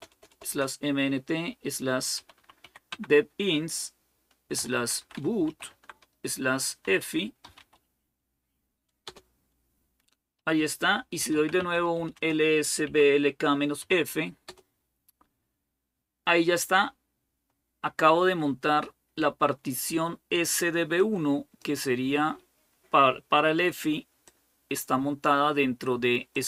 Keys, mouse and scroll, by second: 0.0-0.3 typing, 2.0-2.4 typing, 4.1-14.3 typing, 20.8-22.2 drag, 24.1-25.8 drag, 26.2-26.4 drag.